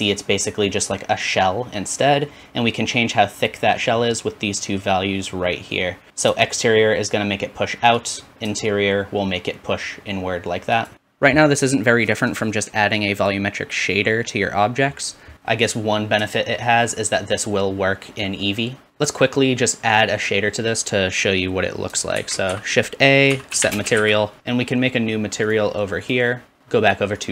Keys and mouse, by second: 0.7-6.4 middle drag, 6.4-8.1 shift+drag, 8.1 shift+middle click, 8.8-10.9 shift+drag, 10.9 shift+middle click, 10.9-19.6 drag, 20.7-24.4 drag, 22.2 shift+a, 24.4-25.5 middle drag, 25.5-26.1 drag.